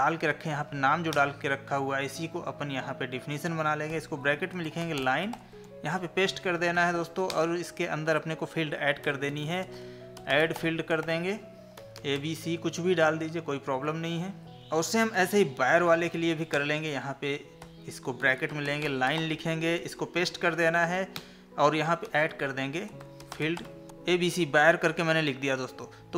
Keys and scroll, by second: 5.9 ctrl+v, 15.1 ctrl+c, 19.8 ctrl+v.